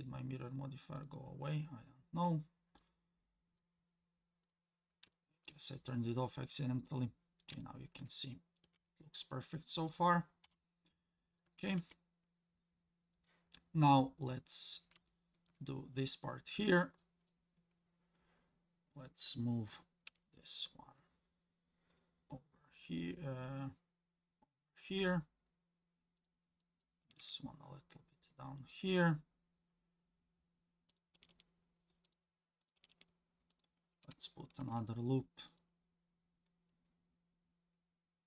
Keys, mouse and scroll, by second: 2.8-3.6 drag, 4.4 click, 5.1 shift+middle click, 6.9 middle click, 7.6 shift+middle click, 8.3 middle click, 8.8 Tab, 9.2 middle click, 10.4 KP_7, 11.4 shift+middle drag, 11.8 Tab, 12.3-13.3 scroll up 1, 13.3 scroll up 1, 15.1 shift+middle click, 17.0 click, 20.1 g, 26.6 click, 27.0 g, 30.9 click, 31.1 g, 32.6 click, 32.8 g, 34.6 ctrl+r.